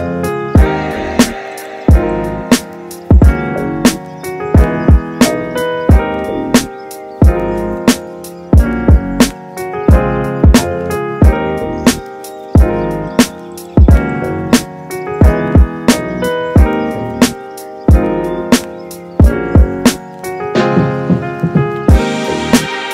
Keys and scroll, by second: 10.9 super+z, 12.6 super+z, 20.0 super+z.